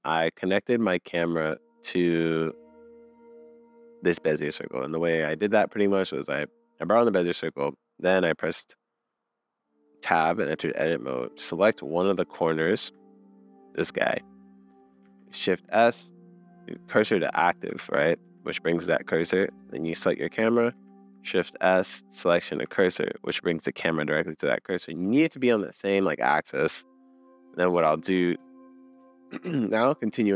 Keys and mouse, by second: 2.0-2.5 middle drag, 7.5 click, 8.3 Tab, 12.6 shift+middle click, 14.3 middle click, 15.0 shift+s, 18.2 Tab, 20.7 shift+s, 24.6 middle click, 26.4 middle click.